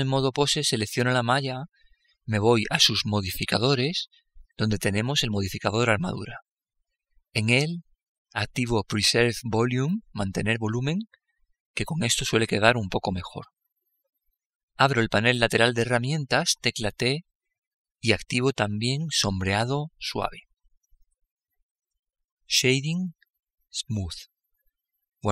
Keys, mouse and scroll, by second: 0.5-2.2 right drag, 2.8-5.0 drag, 12.3-14.0 drag, 16.8 t, 17.9-19.6 drag, 20.7-22.7 drag.